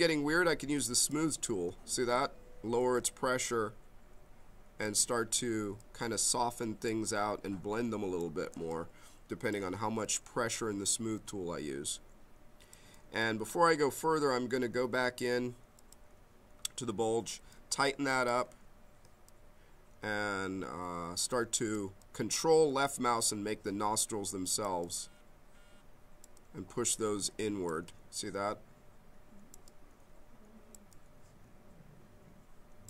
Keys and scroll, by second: 1.9 ctrl+z, 2.8 m, 8.5 m, 17.3 b.